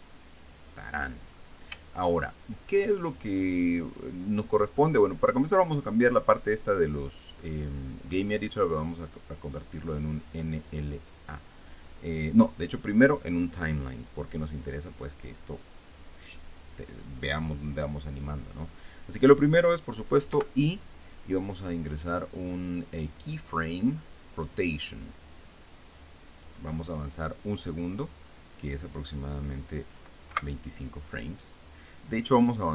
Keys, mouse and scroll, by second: 2.0-2.5 shift+scroll up 4, 2.6 shift+middle click, 3.3 shift+scroll up 2, 3.5-9.1 shift+middle drag, 9.1 click, 13.7 click, 21.0 i, 25.2 click, 28.7 click, 31.0 Right.